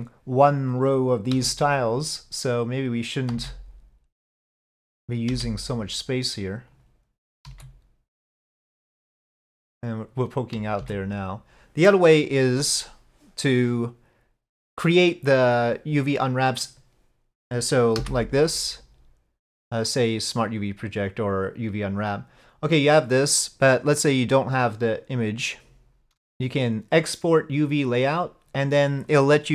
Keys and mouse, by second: 1.4 g, 3.4 s, 5.4 g, 7.5 s, 10.8 s, 18.0 u, 26.0-27.9 shift+drag.